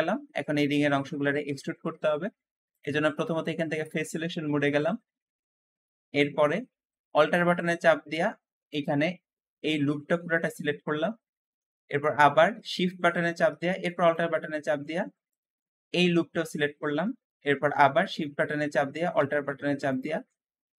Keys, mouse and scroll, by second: 2.6-4.7 drag, 4.7-5.0 scroll up 1, 5.0 middle click, 5.5-6.9 scroll up 3, 5.8 shift+middle click, 6.9 shift+scroll up 1, 6.9-8.6 shift+middle drag, 8.6 alt+click, 9.1-10.3 scroll down 4, 10.3-12.0 alt+middle drag, 12.0-12.4 scroll up 2, 12.4-14.2 shift+middle drag, 14.2-14.6 scroll up 1, 15.2 alt+shift+click, 16.4 scroll down 2, 16.8 shift+middle click, 17.7-18.1 scroll up 1, 18.1 shift+middle click, 18.6-19.8 scroll up 1, 19.8 alt+shift+click, 20.2-20.7 scroll down 3, 20.7 alt+shift+middle click.